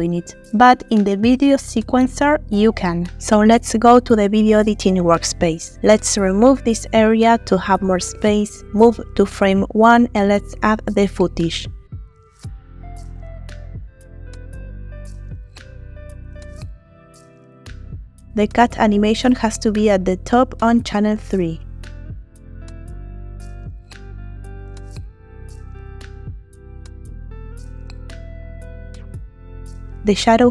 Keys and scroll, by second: 12.2 shift+a, 23.8 shift+a.